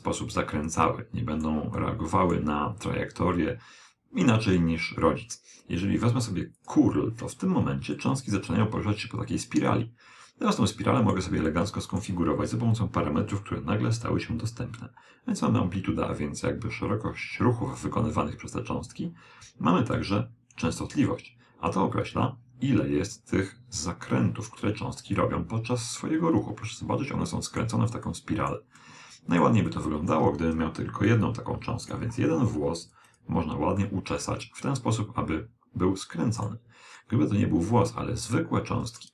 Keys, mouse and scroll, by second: 1.8-3.6 middle drag, 6.6 click, 8.0-9.8 middle drag, 11.5-13.3 middle drag, 15.5 click, 20.8 click, 26.0-27.8 middle drag, 28.1-31.5 middle drag, 31.1-35.0 drag, 33.8-35.6 middle drag, 37.0-39.1 middle drag.